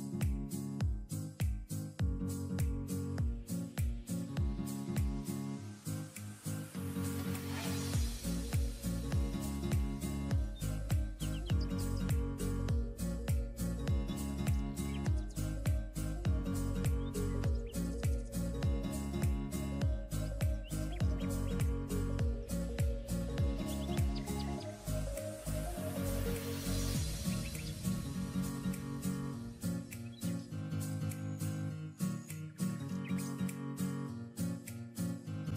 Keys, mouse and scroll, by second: 0.0 alt+scroll down 1, 7.4-7.8 alt+scroll down 1, 10.9 double click, 17.0-17.4 alt+scroll down 1, 18.6 double click, 23.6 ctrl+click, 23.7 ctrl+double click, 24.4 ctrl+e, 25.6 ctrl+e, 27.0 double click, 27.6 alt+scroll down 1, 28.7 double click, 31.0 double click.